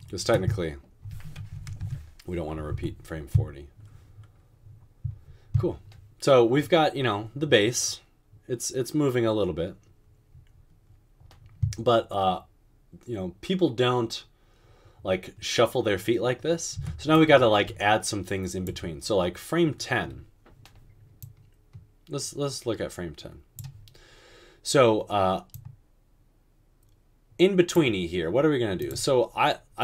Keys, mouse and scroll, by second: 0.2 typing, 1.6 typing, 1.8 Return, 2.9-3.4 typing, 16.9 space.